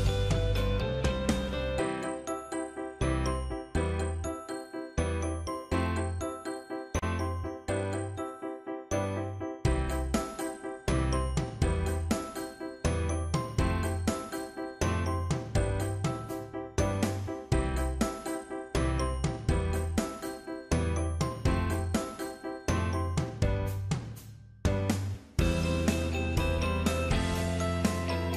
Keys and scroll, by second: 3.7 shift+Up, 4.4 shift+Down.